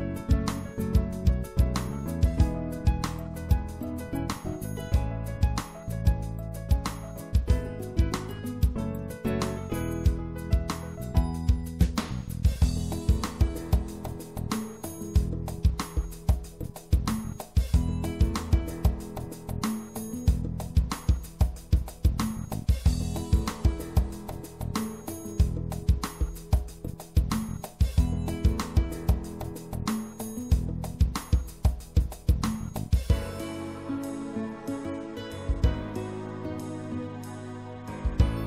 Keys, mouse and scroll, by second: 0.7-3.1 drag, 6.9-10.9 middle drag, 10.9 e, 12.7 s, 24.5 middle click, 26.9 middle click, 27.5-30.7 drag, 28.7-29.7 right drag, 31.9 middle click, 34.8 middle click, 35.1 middle click.